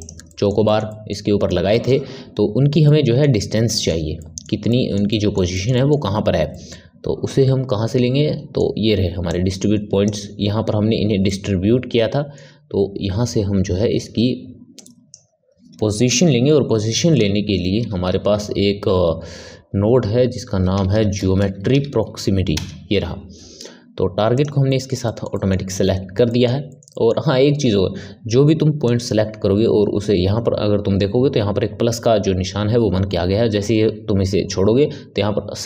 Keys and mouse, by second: 0.2-9.2 middle drag, 9.2 click, 11.2-14.3 middle drag, 14.7 drag, 24.6-28.8 middle drag, 28.8 click.